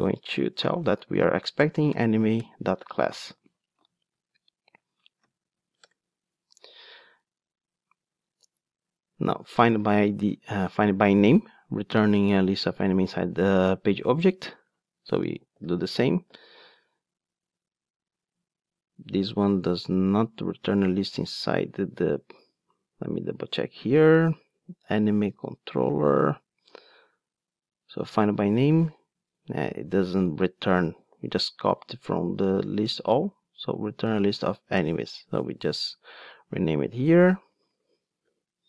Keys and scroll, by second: 1.6 Return, 3.8 alt+shift+Right, 32.0 ctrl+Tab, 36.7 super+x.